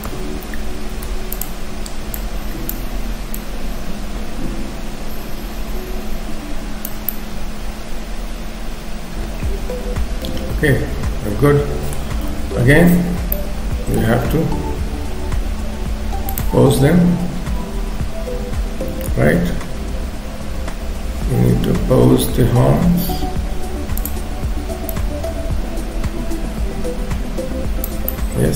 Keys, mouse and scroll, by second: 0.7 shift+f, 2.3 click, 3.5 click, 7.1 middle click, 12.3 KP_7, 13.3 shift+middle click, 16.3 click, 18.8-19.4 scroll up 3, 19.7 scroll down 1, 22.3-23.1 scroll down 4, 23.1 f, 25.0 click, 28.1 middle click.